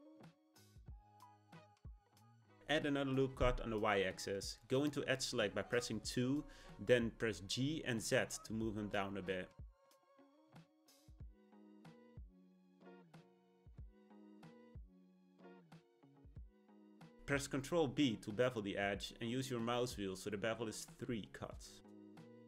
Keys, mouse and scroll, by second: 3.3 r, 6.5 2, 8.1 click, 8.6-10.4 middle drag, 10.4 g, 14.8-16.7 shift+middle drag, 17.3 b.